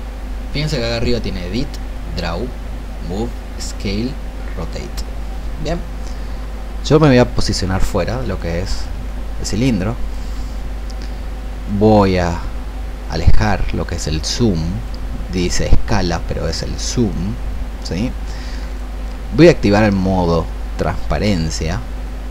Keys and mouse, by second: 11.6-22.3 drag.